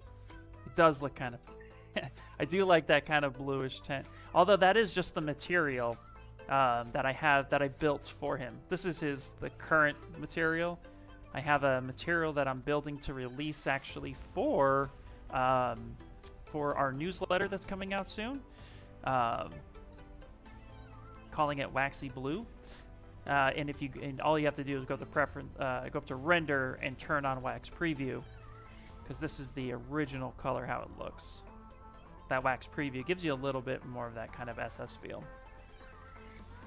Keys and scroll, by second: 0.2 s, 3.1 s, 13.9 s.